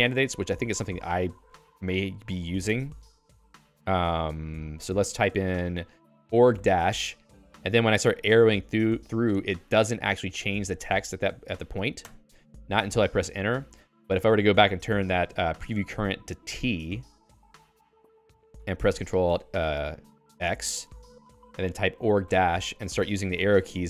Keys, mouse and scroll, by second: 7.0 -, 7.6 Down, 7.8 Down, 8.0 Down, 8.2 Down, 8.4 Down, 8.6 Down, 8.8 Down, 9.0 Down, 9.4 Down, 9.6 Up, 9.8 Up, 10.0 Up, 10.2 Up, 10.4 Up, 10.6 Up, 10.8 Up, 11.0 Up, 11.4 Up, 11.6 Down, 12.2 Return, 13.0 d, 16.4 l, 17.5-18.7 typing, 18.8 ctrl+alt+x, 20.8 k, 22.6 -, 23.2 Down, 23.6 Down.